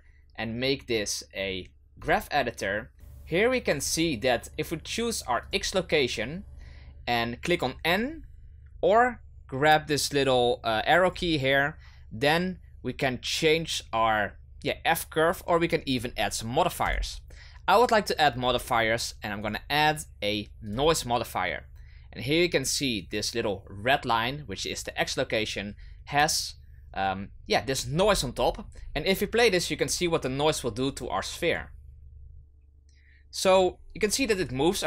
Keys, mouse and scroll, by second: 3.8 click, 5.4 click, 11.0-14.1 drag, 16.8 click, 19.4-22.4 drag, 28.0-30.7 scroll down 8, 31.5-34.8 drag.